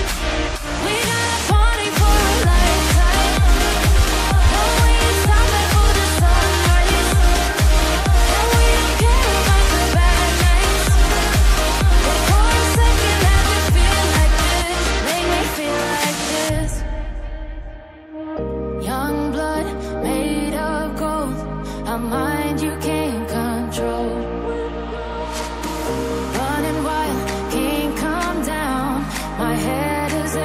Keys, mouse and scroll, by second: 9.9 double click, 12.6 click, 17.9 double click, 28.4 click.